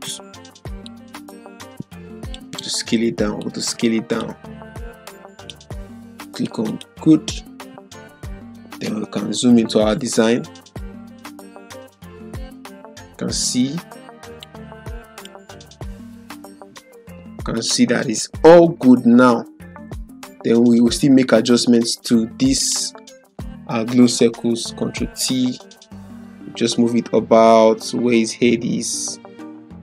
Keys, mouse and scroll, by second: 0.8-2.4 drag, 9.0 ctrl+0, 11.2-14.6 drag, 16.1 ctrl+0, 17.5 click, 18.5 Left, 20.8 Up, 21.1 Left, 22.6 click, 24.3 ctrl+t, 26.1 click, 26.2-29.8 drag.